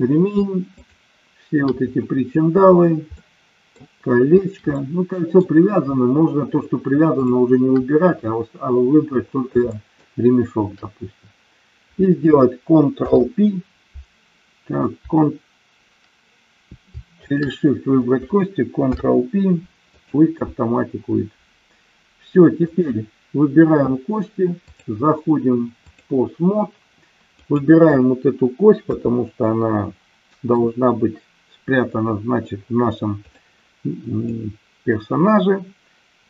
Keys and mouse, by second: 3.2-3.8 middle drag, 4.8-5.4 middle drag, 7.2 shift+click, 9.7-10.1 shift+middle drag, 12.9 ctrl+p, 17.2 shift+click, 18.7 ctrl+p, 22.6 click, 24.6-26.1 drag, 27.3 click, 28.9 KP_3, 33.2 click, 34.2-36.2 drag.